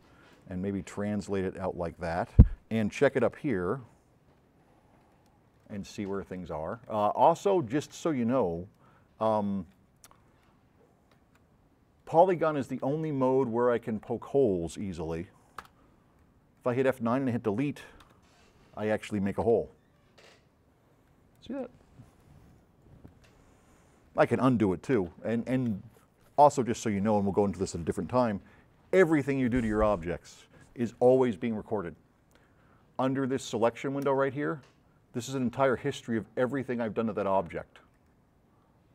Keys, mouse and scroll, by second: 0.5 click, 1.5 click, 3.2-5.0 right drag, 3.2 s, 6.0 middle click, 6.4 middle click, 6.4 scroll up 2, 6.8 s, 7.0 right click, 7.4 right click, 7.9 right click, 9.3 right click, 12.8 right click, 12.8 s, 13.6 right click, 15.6 F9, 16.2 click, 19.5 s, 24.1 right click, 25.0 z, 34.1 click, 38.0 click.